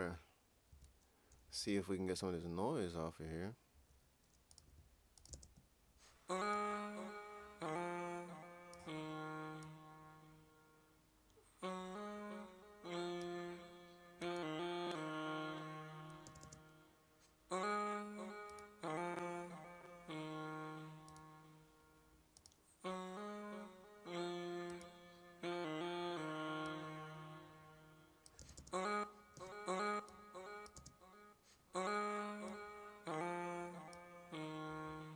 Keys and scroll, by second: 0.7 typing, 16.4 typing.